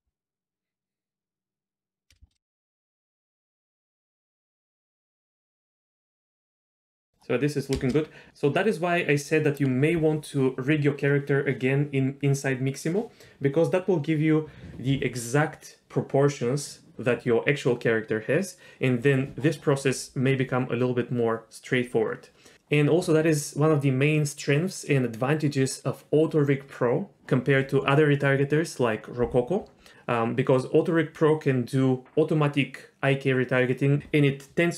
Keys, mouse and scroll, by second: 2.1-3.5 typing, 2.9 ctrl+z, 3.9-6.0 drag, 7.5 space, 10.0 space, 10.9 click, 11.1 space, 14.4 space.